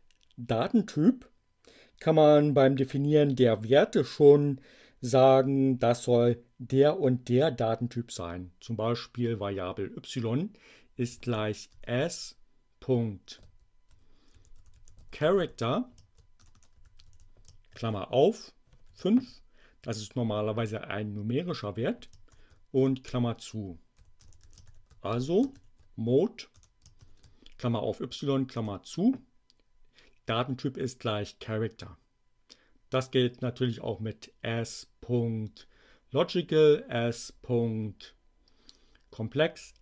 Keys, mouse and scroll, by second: 10.8-12.1 typing, 13.4-17.8 typing, 18.8 5, 22.2 shift+9, 22.7 shift+Return, 23.7-27.0 typing, 28.5 Return.